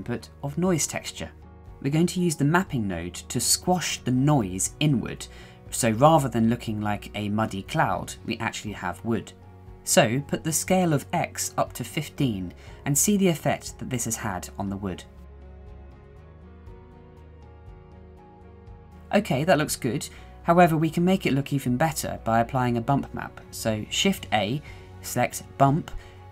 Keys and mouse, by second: 10.1-15.1 drag, 15.2-16.2 middle drag, 16.2 click, 16.5-17.2 middle drag, 17.2 click, 17.3 middle click, 17.4 click, 17.5-20.2 middle drag, 20.6 middle drag, 20.9-21.3 shift+middle drag, 21.8 shift+middle click, 22.4 shift+middle click, 23.1 shift+middle click, 23.6 shift+middle click, 24.7 shift+a.